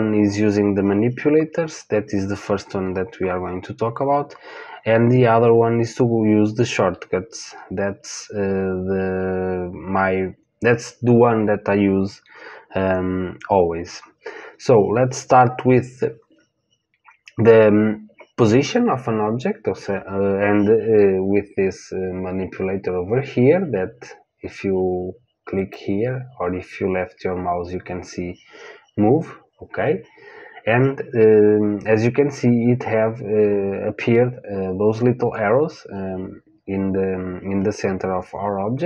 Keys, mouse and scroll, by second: 25.5-28.9 drag.